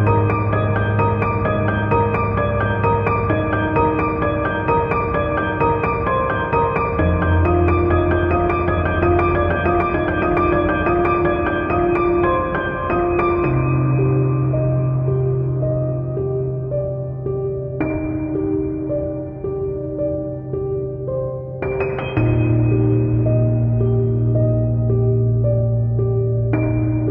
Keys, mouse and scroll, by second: 0.4 shift+click, 0.5 scroll down 1, 0.5 KP_1, 0.6 scroll up 1, 0.7 scroll down 1, 9.0-10.1 middle drag, 9.4 scroll down 1, 10.1 click, 10.4 o, 10.4 Return, 10.6 middle click, 10.8 scroll up 2, 10.9 click, 11.2 click, 11.5 Return, 11.6 scroll down 1, 11.7-15.8 typing, 11.9 shift+middle click, 12.0-12.5 scroll up 2, 12.5 click, 13.1 middle click, 13.4 click, 13.6 scroll down 2, 13.7-14.3 shift+middle drag, 13.7 scroll up 2, 14.3 shift+click, 14.4 middle click, 14.7 scroll up 2, 15.1 scroll down 1, 15.2 middle drag, 15.5 click, 15.7 shift+drag, 16.3 ctrl+z, 16.3 scroll up 1, 16.4 click, 16.7 middle click, 17.7 shift+click, 17.9 x, 18.4 ctrl+v, 18.5 KP_1, 18.6-19.2 scroll down 3, 18.6 g, 18.9 middle drag, 18.9 KP_Decimal, 19.2 shift+click, 19.4 click, 19.8 shift+click, 20.1 KP_Divide, 20.3 middle click, 20.4-27.1 typing, 20.9 click, 21.0 middle click, 21.1-21.9 scroll down 2, 21.6 click, 21.9 click, 22.3 scroll up 1, 22.6 middle click, 22.6 scroll down 1, 23.2 click, 23.3 shift+middle click, 24.5 middle click, 24.6 click, 24.9 scroll down 1, 25.2 click, 25.3 click, 25.6 click, 25.9 scroll up 1, 26.0 shift+middle click, 26.1 scroll down 1, 26.2 click, 26.7 shift+middle click.